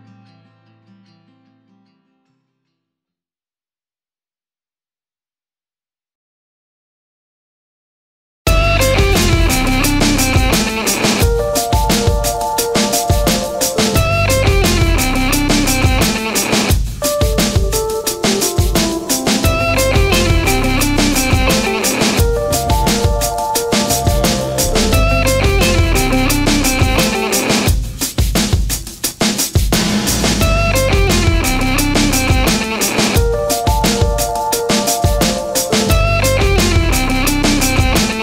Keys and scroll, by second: 24.7 BackSpace, 26.0 BackSpace.